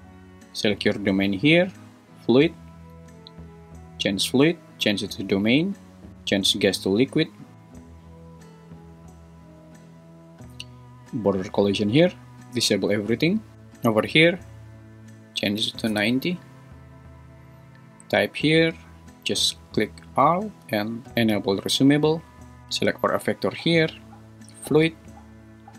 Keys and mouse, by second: 3.8-5.3 drag, 6.5-7.5 drag, 12.6 click, 14.9-16.0 drag, 18.6-20.1 drag, 21.6-22.6 drag, 22.7 g, 23.3 Escape.